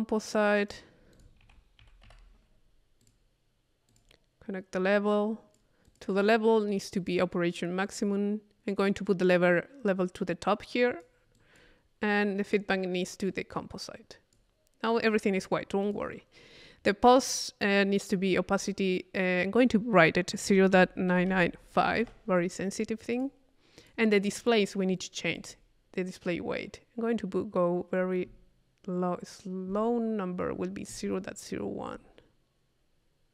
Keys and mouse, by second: 0.6 right click, 1.1 click, 1.4 c, 3.0-4.5 drag, 4.8-5.8 drag, 5.9 click, 7.0 click, 7.8 click, 10.9-12.0 drag, 12.4 click, 13.3-14.6 drag, 14.9 click, 15.4 click, 15.8 click, 17.1 click, 18.6 middle click, 19.4-21.4 drag, 23.1 click, 23.8-24.9 drag, 25.4 click, 26.2 middle click, 27.2 middle click, 27.4 middle click, 30.3-33.3 middle drag.